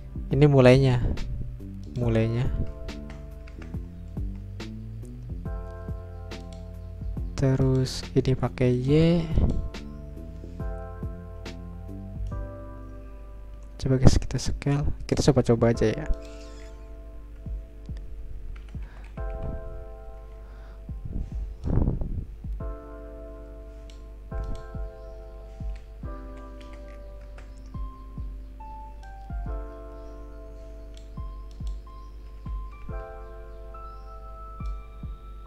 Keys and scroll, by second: 3.0 BackSpace, 4.2 0, 6.0 Return, 18.6 BackSpace, 19.1 Delete, 19.3 Delete, 20.4 Return, 25.8 Delete, 26.3 Delete, 26.4 Delete, 27.3 BackSpace, 27.8 0, 27.9 Return, 32.4 BackSpace, 34.9 0.